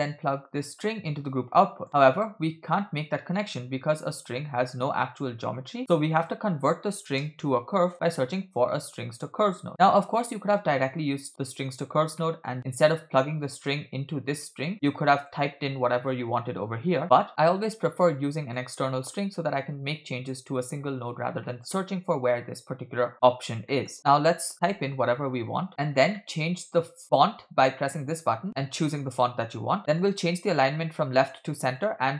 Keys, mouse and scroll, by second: 0.7-1.9 drag, 4.2-5.2 drag, 5.5 shift+a, 9.8 click, 12.2 middle click, 12.5-13.4 scroll up 1, 13.4 scroll up 2, 13.5 click, 14.4 click, 15.2-17.3 drag, 17.6-18.6 drag, 18.8 middle click, 19.1-19.6 scroll up 1, 19.6-20.9 drag, 21.1-21.4 scroll down 2, 21.4 middle click, 23.7 middle click, 23.9-24.5 scroll up 2, 24.0-25.7 drag, 25.1 a, 25.7 BackSpace, 26.1-26.5 middle drag, 28.0 click, 30.0-31.4 drag, 31.8-32.1 drag.